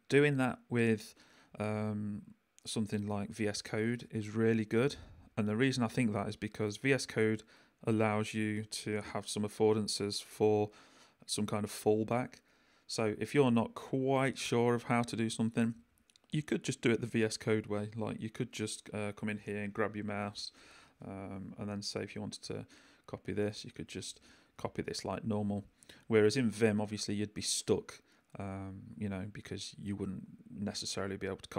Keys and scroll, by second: 17.8 i, 24.8 shift+super+c, 25.5 super+c, 27.7 i.